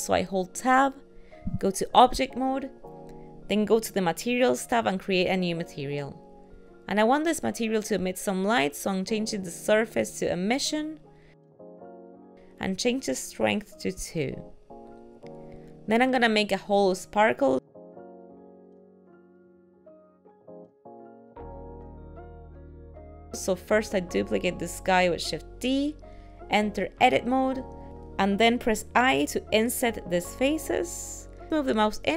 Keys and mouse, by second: 0.8 Tab, 3.2 click, 5.4 click, 8.1 click, 13.3 click, 19.2 ctrl+middle click, 22.1 shift+middle click, 23.6 shift+d, 25.8 Tab.